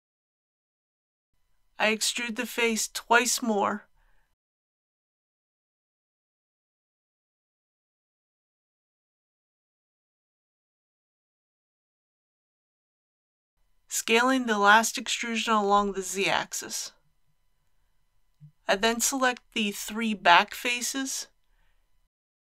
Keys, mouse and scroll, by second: 0.1 click, 0.5 click, 1.5 click, 2.6 e, 4.0 x, 6.6-7.7 drag, 7.0 e, 7.3 x, 13.8 s, 14.1 z, 17.2 click, 20.8 3, 21.5-22.4 middle drag.